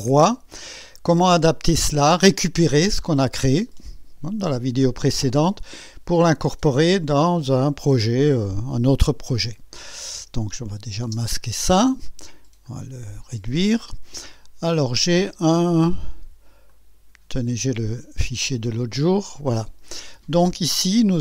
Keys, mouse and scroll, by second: 10.7 click, 11.1 space, 12.6 click, 16.7 click, 18.5 click.